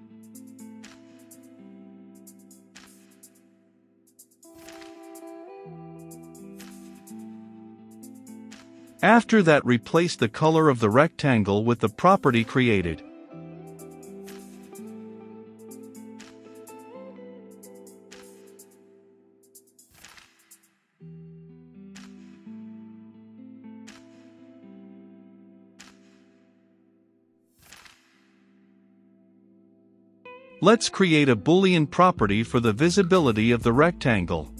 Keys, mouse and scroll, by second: 0.0 click, 0.6 Return, 0.8-1.8 typing, 1.1 Return, 2.7 click, 3.4-3.9 typing, 5.1-6.5 typing, 5.9 Return, 7.2 click, 7.5 Return, 7.7 shift+`, 8.1 ctrl+v, 9.0 click, 9.9-11.7 middle drag, 11.7-12.8 drag, 12.8 Return, 12.9 a, 13.1 c, 13.3 t, 14.9 v, 15.1 e, 16.2 m, 16.3 e, 16.4 n, 16.6 u, 17.2 Return, 18.5-24.4 drag, 24.4-28.8 middle drag, 28.8 click, 29.6 Return, 29.9-34.5 typing, 30.0 Return, 30.5 Return, 31.5 Return, 32.4 click, 33.8 Return.